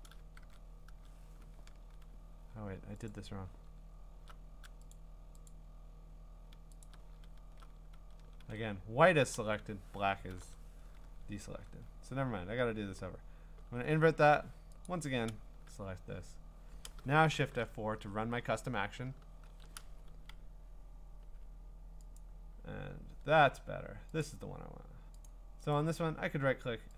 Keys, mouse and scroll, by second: 0.8 Tab, 3.1 click, 3.8 middle click, 3.9 middle click, 4.9 click, 5.5 click, 6.8 ctrl+click, 6.9 ctrl+click, 7.3 middle click, 7.5-8.4 scroll, 8.4 ctrl+d, 10.3 ctrl+i, 11.4-11.8 ctrl+scroll, 12.4-13.8 scroll, 14.9 ctrl+click, 19.2 F4, 22.2 click, 23.1 scroll, 24.2 click, 25.3 click.